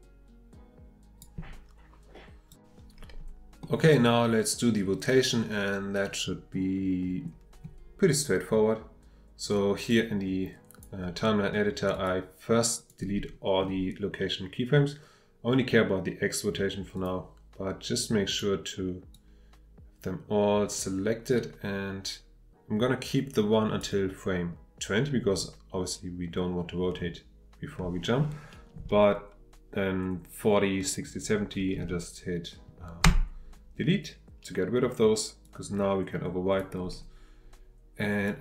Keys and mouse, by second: 3.6-7.6 middle drag, 10.2 click, 11.9 click, 12.8 click, 16.9 click, 18.3 click, 19.1-23.9 drag, 35.4-36.6 drag, 38.2-38.4 drag.